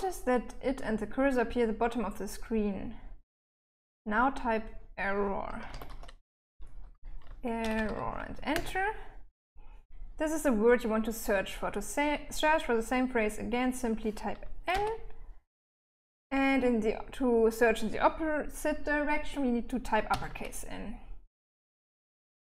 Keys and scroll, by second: 4.6-7.6 typing, 7.7 Return, 13.9 n, 19.3 shift+n.